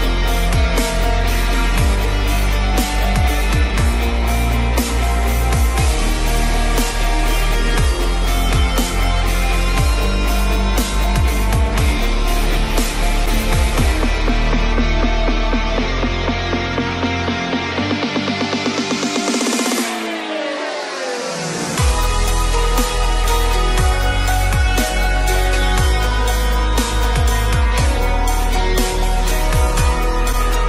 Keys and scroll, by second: 21.3 ctrl+alt+z, 22.7 Delete, 26.0 ctrl+g.